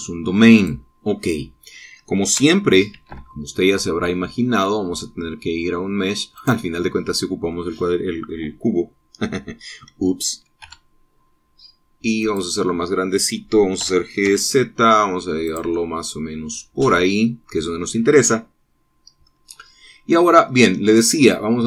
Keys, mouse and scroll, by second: 1.4 click, 3.8 shift+a, 7.2 click, 8.4 click, 11.5 s, 13.1 click, 13.5-14.2 scroll down 1, 14.7 g, 15.1 z, 16.3-19.4 drag, 19.4 scroll down 1.